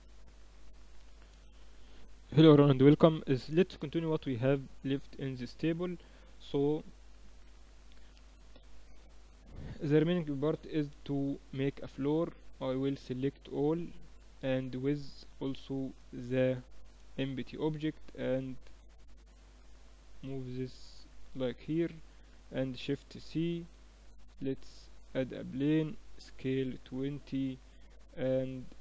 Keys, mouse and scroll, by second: 3.2-11.9 middle drag, 10.3 KP_3, 11.9 a, 13.5 a, 14.7-16.4 drag, 16.0 a, 16.5 a, 17.5-19.5 drag, 21.6 a, 22.7 shift+c, 23.7 shift+a, 25.6 s, 27.7-28.8 middle drag.